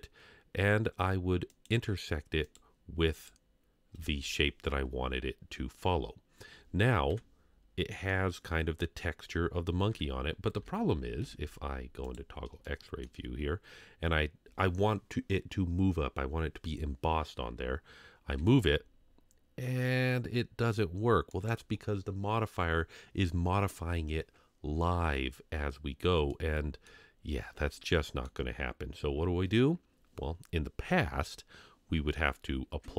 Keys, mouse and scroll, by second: 1.5 click, 2.4 click, 6.4 scroll up 1, 7.1 KP_Divide, 7.7 scroll up 2, 8.1-8.5 middle drag, 10.6 KP_3, 11.2 z, 12.6-13.0 shift+middle drag, 13.2 scroll up 1, 18.9 g, 26.3-26.9 middle drag, 27.7 shift+scroll up 1, 27.8-28.2 shift+middle drag.